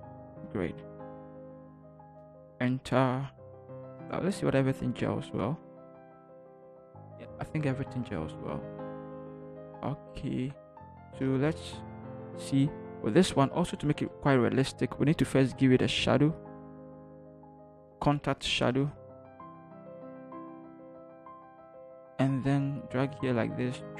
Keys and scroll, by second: 3.8 ctrl+0, 5.9 ctrl+-, 8.7 =, 9.2 =, 10.4 =, 18.8-19.6 typing, 21.7 ctrl+t.